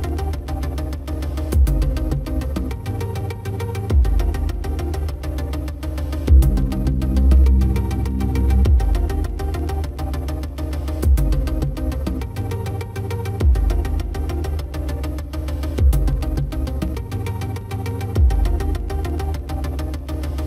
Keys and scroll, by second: 6.8 ctrl+t.